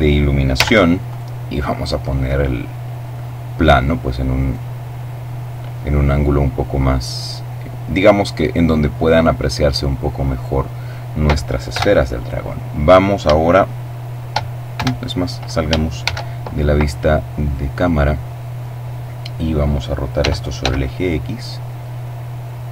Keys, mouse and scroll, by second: 0.3 right click, 1.1-3.0 drag, 3.7 right click, 4.5-6.1 middle drag, 6.1-7.6 drag, 8.4-10.1 middle drag, 11.0 KP_0, 14.0 shift+KP_0, 15.2 shift+d, 16.6 click, 19.4 r, 19.8 x, 22.0 click.